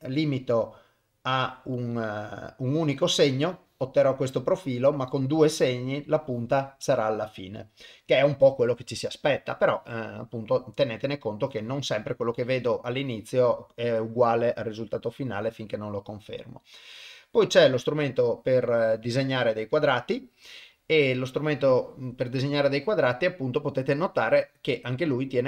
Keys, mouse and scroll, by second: 19.6 click, 21.4-25.4 drag.